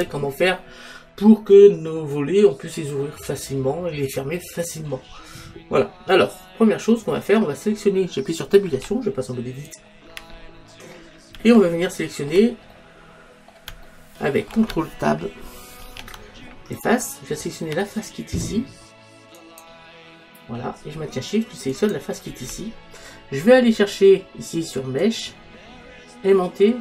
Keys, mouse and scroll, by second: 3.1-5.1 middle drag, 8.8 Tab, 10.4-15.8 middle drag, 15.9 ctrl+Tab.